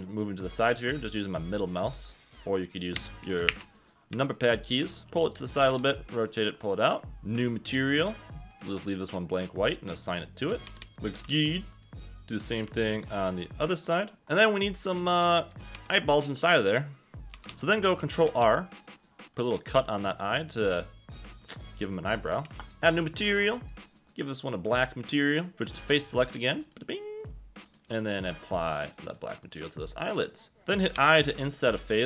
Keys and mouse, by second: 1.1 click, 3.0-5.7 typing, 7.7 click, 10.0 click, 10.6-11.2 typing, 10.8 Tab, 10.8 ctrl+z, 11.7 click, 14.1 g, 15.7 3, 17.3 a, 17.5 a, 18.2 ctrl+r, 19.3 click, 21.4 click, 22.4 ctrl+r, 22.6 click, 24.4 click, 26.6 click, 27.9 shift+middle click, 28.1 shift+click, 28.2 shift+middle click, 29.0 click, 29.4 click, 29.9 click, 30.6 Escape, 30.6 ctrl+z, 30.9 i.